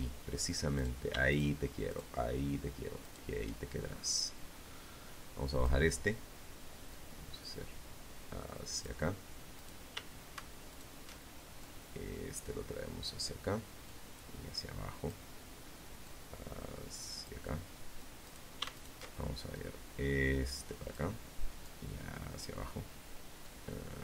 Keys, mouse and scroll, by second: 0.0 shift+right click, 1.2 shift+right click, 2.4-4.0 drag, 5.1-7.2 drag, 7.7 right click, 8.8 alt+shift+right click, 9.8-11.4 drag, 12.0-13.4 drag, 14.2-15.6 drag, 16.4 right click, 16.9 alt+shift+right click, 17.7-19.3 drag, 19.8 click, 21.6-23.4 drag.